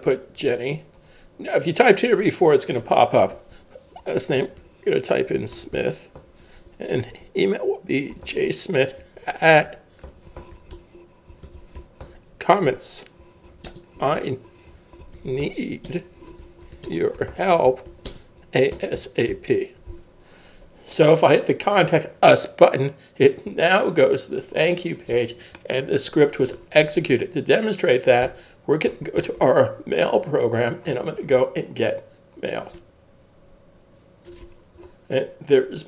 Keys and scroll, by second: 4.1-6.2 typing, 8.0-12.3 typing, 14.3-20.3 typing, 28.2 super+Tab.